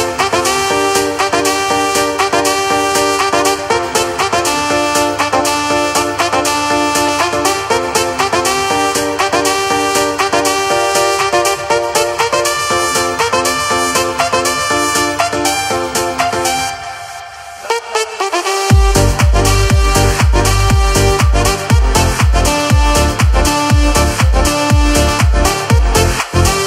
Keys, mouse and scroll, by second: 1.0 click, 3.5 alt+a, 3.7 scroll, 4.3 scroll, 5.1 click, 5.1-5.6 shift+scroll, 5.7-6.2 scroll, 6.7-7.2 scroll, 7.7 shift+g, 9.1 r, 11.8 g, 13.7 click, 14.8 g, 20.9 click, 21.7 r, 24.8 r.